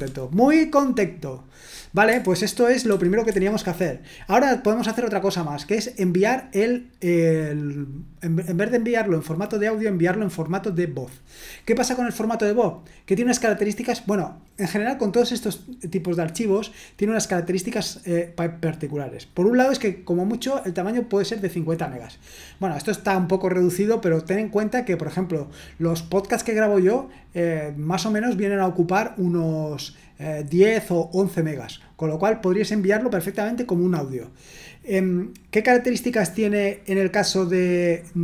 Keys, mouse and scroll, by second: 2.8 super+1, 3.2 super+2, 10.2 click.